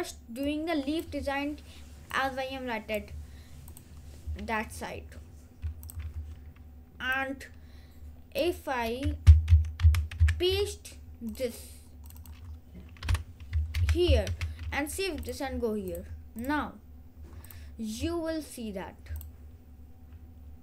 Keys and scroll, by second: 9.6 Down, 10.3 Up, 13.2 BackSpace, 13.8 ctrl+v, 14.3 ctrl+s.